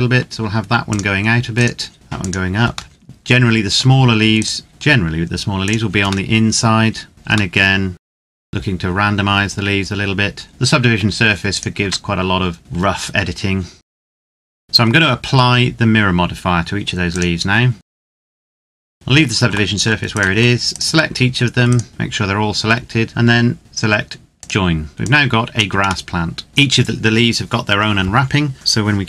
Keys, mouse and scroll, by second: 0.6 click, 1.3 right click, 1.9 click, 2.7 middle click, 4.1 right click, 4.7 r, 5.4 click, 6.1 middle click, 7.1 right click, 7.3 middle click, 7.9 Tab, 8.1 click, 8.3-10.5 scroll down 1, 10.5 middle click, 11.2 right click, 11.5 Tab, 12.6 click, 13.8 Tab, 14.0 right click, 14.1 click, 14.3 Tab, 14.6 right click, 16.8 click, 17.7 right click, 17.9 click, 18.0 right click, 18.1 click, 18.3 right click, 18.4 click, 18.5 right click, 18.7 click, 18.7 right click, 18.9 click, 18.9 middle click, 19.9 shift+right click, 21.9 middle click, 24.1 click, 25.9 middle click.